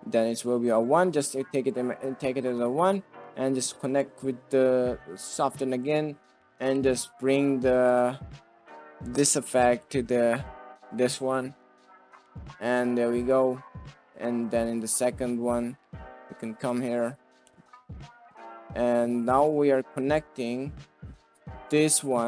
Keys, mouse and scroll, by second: 0.3 click, 1.5 click, 2.5 middle click, 3.6 middle drag, 5.3 click, 6.3 middle click, 6.4 click, 6.6 middle click, 7.8 click, 8.5 middle click, 9.0 middle click, 9.6 middle click, 11.3 middle click, 11.9 middle drag, 13.2 click, 14.4 click, 16.2 middle click, 17.3 middle click, 19.5 click, 20.5 click.